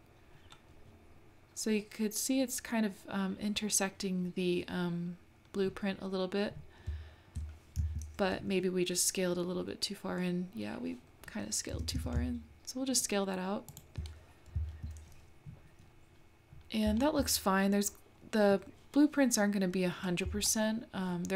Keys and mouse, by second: 8.5 `, 11.7 s, 14.5 `, 20.4 shift+middle click.